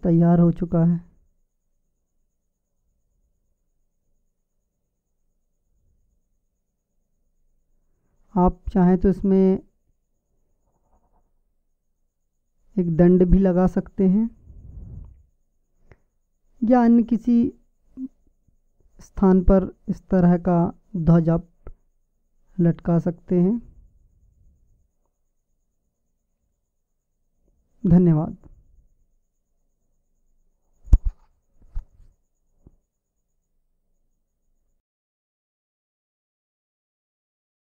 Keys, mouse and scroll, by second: 2.7-4.7 middle drag, 6.9-10.3 middle drag, 32.9-37.6 drag.